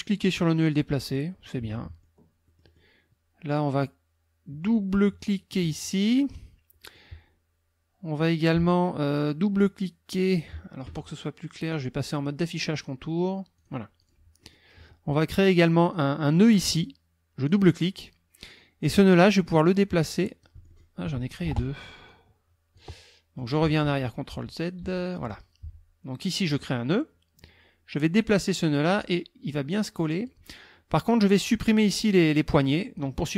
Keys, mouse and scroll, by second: 0.3-1.3 drag, 1.5 click, 2.5 click, 5.5 click, 6.4 middle click, 11.7 click, 13.6 click, 14.0 click, 14.4 click, 15.8 click, 17.5 click, 19.2-21.0 drag, 22.1 click, 23.8 ctrl+z, 26.5 click, 28.2-30.5 drag, 31.6-33.1 drag.